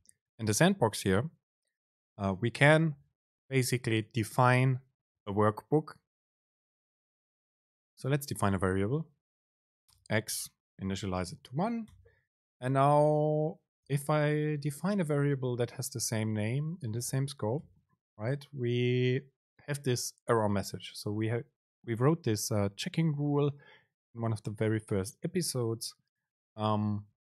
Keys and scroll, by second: 12.1 Return, 16.2 Right, 17.7 BackSpace.